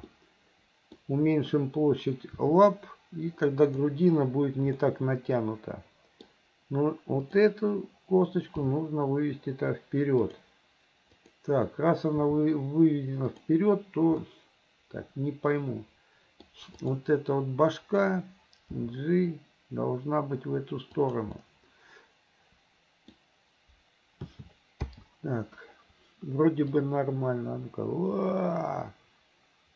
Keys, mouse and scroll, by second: 0.2 middle click, 2.4 r, 4.8-6.3 middle drag, 7.2 click, 8.7 g, 11.2 click, 12.3 g, 14.3-14.7 scroll up 1, 14.7-16.6 middle drag, 16.8 click, 18.7 g, 21.4-23.2 middle drag, 24.3 a, 24.9 i, 26.8-29.7 drag.